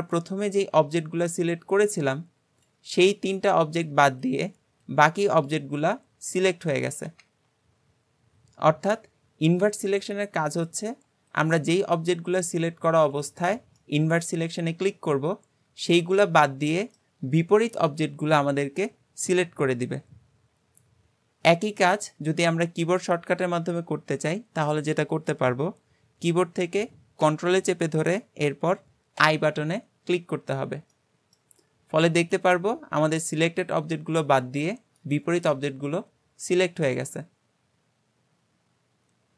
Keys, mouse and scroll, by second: 10.6 click, 11.4 shift+click, 11.8 shift+click, 12.5 shift+click, 13.0 shift+click, 13.8-17.0 middle drag, 31.0-31.6 middle drag, 31.6 g, 35.6-38.6 middle drag.